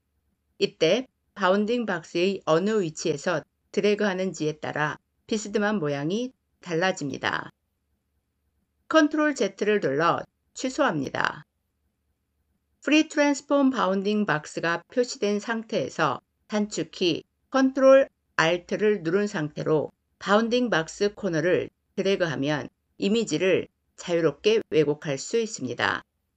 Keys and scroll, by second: 8.8 ctrl+z.